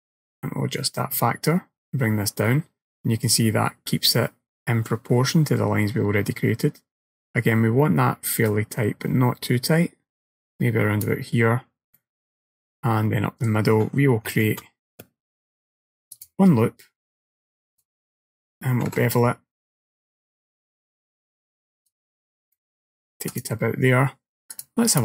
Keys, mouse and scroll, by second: 12.0 middle click, 14.3 ctrl+r, 18.9 ctrl+b, 22.6 middle click, 23.4 click, 24.6 click.